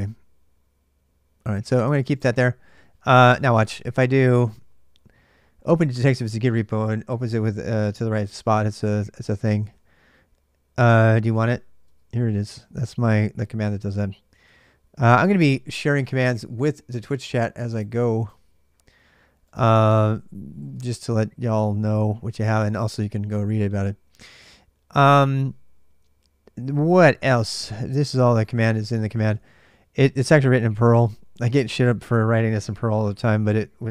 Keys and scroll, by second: 0.0-32.6 typing, 12.2 Return, 29.1 ctrl+[.